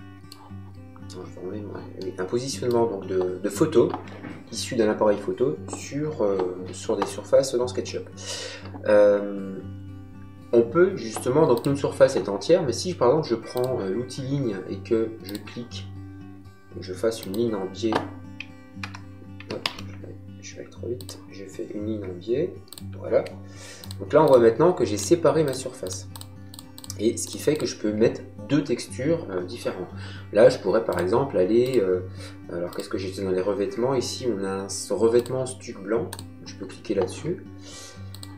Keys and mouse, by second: 1.9 middle click, 11.5 click, 13.5 click, 15.2 click, 17.1 click, 18.7 Escape, 19.5 ctrl+z, 20.9 click, 22.6 click, 30.8 click, 35.1 click, 38.0 click.